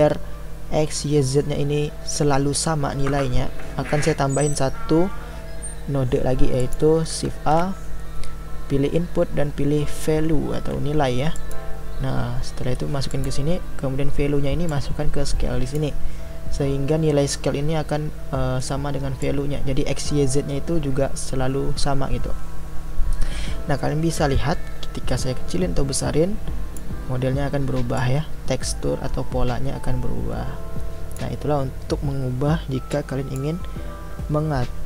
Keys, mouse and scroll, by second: 6.6-11.5 drag, 14.7-17.9 drag, 19.5-31.0 drag, 32.9-34.8 drag.